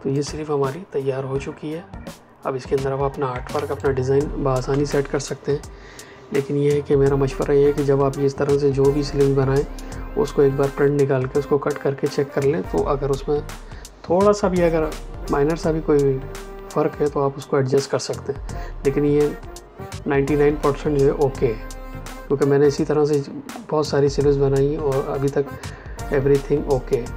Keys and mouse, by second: 0.0 space, 3.4 ctrl+space, 3.7 click, 3.9 ctrl+space.